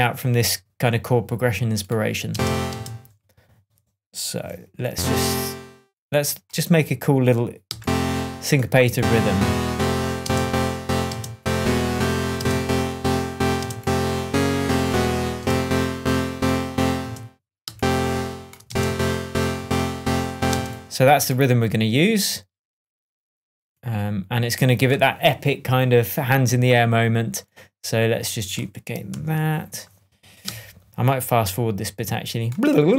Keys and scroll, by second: 2.2 space, 10.2 alt+space, 11.0 space, 12.3 alt+space, 13.3 space, 13.5 space, 15.3 alt+space, 15.9 Up, 17.6 alt+space, 18.6 alt+space, 19.5 p, 20.4 space, 29.0 super+d.